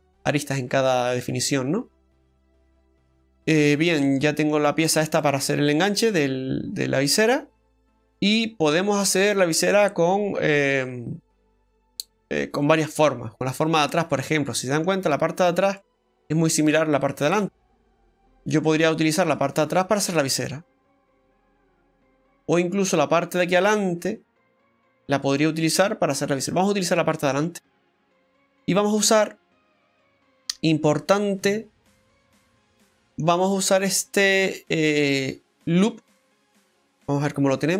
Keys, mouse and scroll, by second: 0.7-1.5 scroll up 3, 1.7-2.4 scroll down 3, 2.5 middle click, 3.5 Tab, 4.1 middle click, 4.7-5.2 scroll down 2, 5.2 middle click, 7.3 scroll down 1, 7.6 shift+middle click, 8.0 middle click, 15.8 middle click, 25.4 middle click, 27.3 Tab, 27.6 scroll up 2, 28.2 middle click, 28.2 scroll up 1, 28.8-29.2 scroll up 2, 31.2 scroll up 2, 31.9 middle click, 31.9-32.7 scroll up 1, 36.3 middle click.